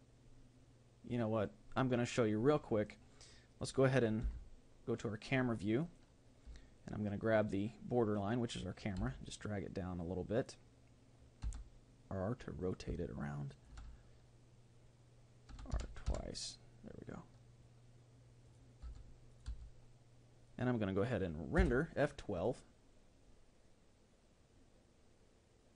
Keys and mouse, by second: 2.9-4.9 right drag, 4.2 KP_0, 5.8-8.2 right drag, 10.3 g, 11.4 r, 12.9 r, 15.7 r, 18.8 r, 19.9 g.